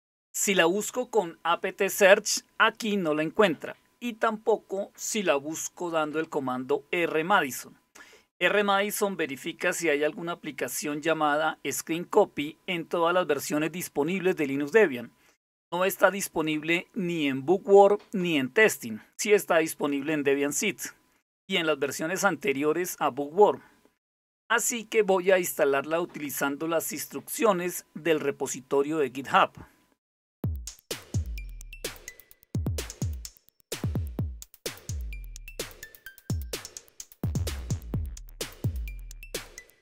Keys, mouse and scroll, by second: 8.8-11.3 drag, 19.3-20.5 drag, 30.6 super+7, 31.2 alt+super+w, 32.2-34.3 typing, 35.2 click.